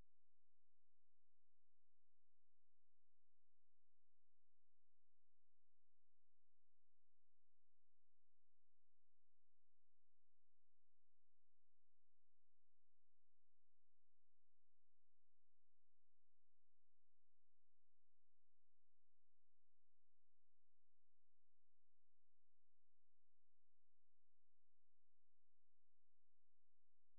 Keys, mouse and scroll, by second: 1.4 click, 2.0 click, 2.6 scroll up 1, 3.5 click, 4.1 click, 5.0 click, 5.5 click, 6.0 click, 7.2 click, 7.7 click, 8.3 click, 8.9 click, 9.4 click, 10.2 click, 11.2 click, 12.8 click, 13.3 click, 13.9 click, 14.3 click, 14.7 click, 15.2 click, 15.7 click, 16.1 click, 16.7 scroll down 2, 17.6 click, 19.1 click, 19.8 click, 20.4 click, 20.5 click, 21.0 click, 21.6 click, 22.2 click, 22.6 click, 23.1 click, 23.9 click, 25.5 click.